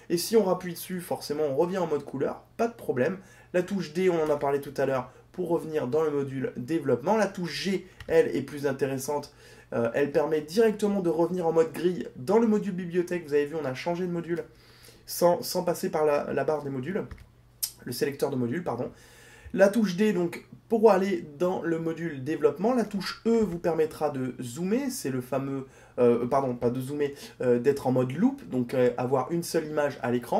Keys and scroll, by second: 7.9 g, 23.4 e.